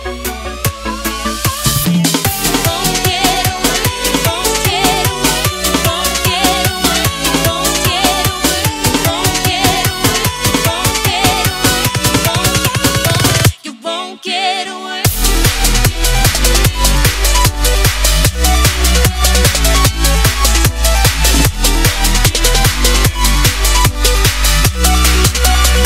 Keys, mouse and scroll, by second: 2.0 ctrl+s, 4.7 click, 11.8 ctrl+s, 13.7 click, 19.2 ctrl+z, 20.8 ctrl+s, 22.7 click.